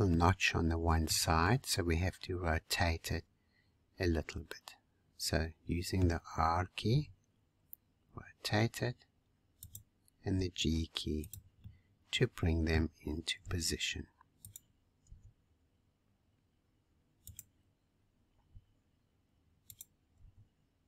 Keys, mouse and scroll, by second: 0.1-4.4 middle drag, 11.6-13.4 middle drag, 13.4 r, 15.0 g, 18.0-18.4 scroll up 2, 18.4 r, 20.1 g.